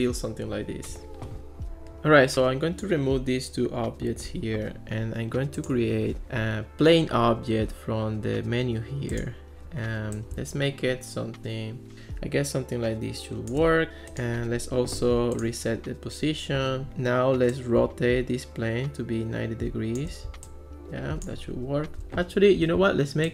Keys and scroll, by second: 4.3 BackSpace.